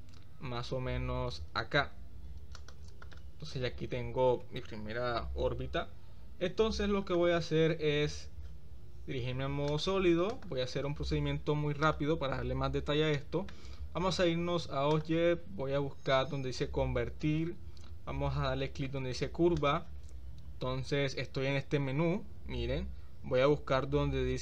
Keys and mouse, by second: 9.7 click, 10.3 click, 13.2 shift+middle click, 15.0-19.7 drag.